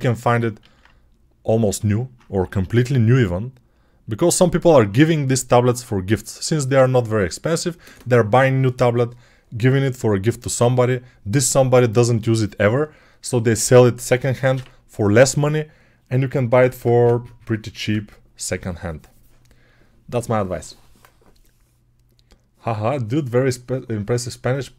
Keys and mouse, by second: 0.5 alt+q, 2.3 g.